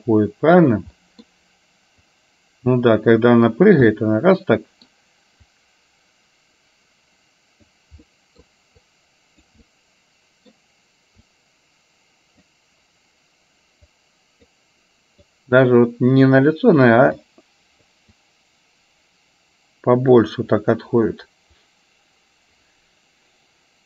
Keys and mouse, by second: 1.0 middle click, 2.1-3.7 drag, 3.9-5.0 middle drag, 5.6-7.7 drag, 8.2 middle click, 8.9 click, 9.6-10.6 middle drag, 11.4-12.5 drag, 14.1 click, 15.4 click, 16.4 click, 17.2 click, 18.2-20.4 drag.